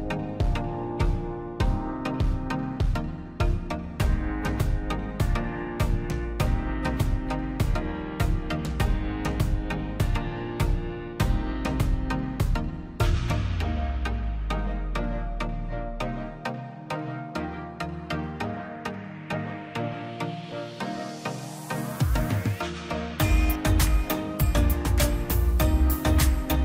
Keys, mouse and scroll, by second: 0.7 click, 2.2 click, 2.5-3.1 scroll up 1, 3.1 middle click, 3.6-5.2 drag, 5.6-7.1 drag, 7.1-7.6 scroll down 1, 7.6 l, 8.0 click, 8.5 scroll down 1, 8.7 middle click, 9.4 click, 9.5-9.9 scroll down 1, 9.9 click, 10.2 space, 11.0 click, 11.3 scroll up 1, 11.6 ctrl+click, 13.7-14.2 scroll up 1, 14.4 ctrl+z, 14.7 click, 16.1 ctrl+click, 16.5 scroll down 1, 16.7 middle click, 17.0 middle click, 17.3 scroll up 1, 17.6 ctrl+click, 19.0 m, 20.0 click, 20.9 scroll up 1, 21.6 click, 22.0 x, 24.1 scroll down 1, 25.3 middle click, 25.8 scroll up 1.